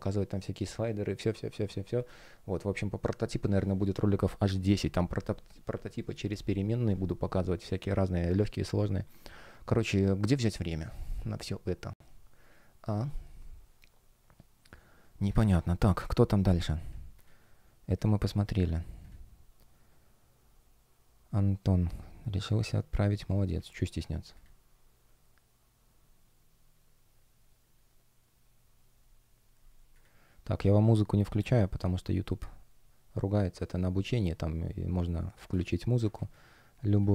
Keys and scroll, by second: 31.4 space, 36.0 space.